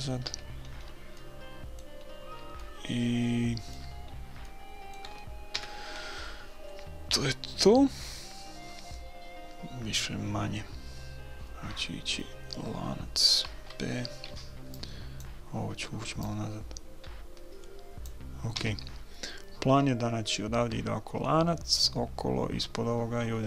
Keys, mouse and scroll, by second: 0.3 a, 0.6-5.5 middle drag, 5.5 click, 5.5 KP_1, 14.3 b, 16.2-18.0 drag, 18.6 a.